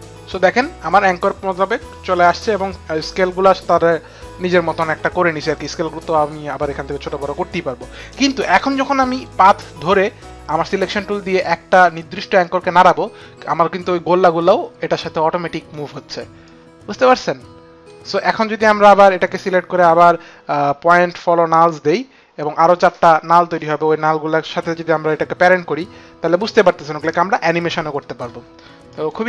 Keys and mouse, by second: 8.7 click, 10.8 click, 12.0 click, 16.0 click, 28.4 click.